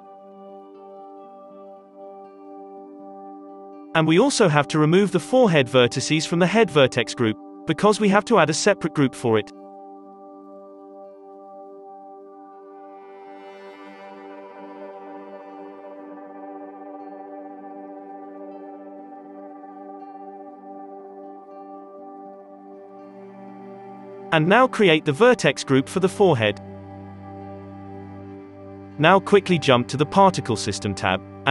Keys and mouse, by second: 2.3 Tab, 4.6-6.7 drag, 5.8 KP_3, 6.3 z, 6.7-7.9 middle drag, 7.0 z, 7.1 click, 7.9 Tab, 8.1 z, 8.6 Tab, 9.5-16.7 drag, 10.0 Tab, 11.0 f, 11.8 ctrl+z, 16.7-22.0 middle drag, 16.8-23.6 drag, 20.6 ctrl+s, 22.0 KP_3, 24.0 Tab, 24.6 middle click, 24.6 z, 25.0 alt+a, 25.2-26.5 ctrl+right drag, 25.2 1, 25.2 3, 26.5-28.3 drag, 27.3 Tab, 27.3 right click, 27.5 z, 28.1 KP_3, 29.3-31.5 drag.